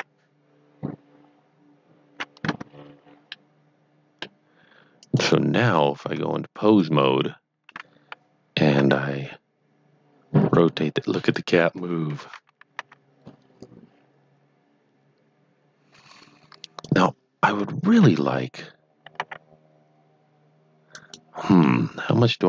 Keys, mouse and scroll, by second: 2.4 KP_7, 2.4 Tab, 3.4 middle click, 5.0 click, 6.6 click, 11.2 r, 11.3 right click, 12.2 KP_1, 12.7 r, 16.8 right click, 17.9 KP_7, 19.2 r, 20.9 right click, 21.7 middle click.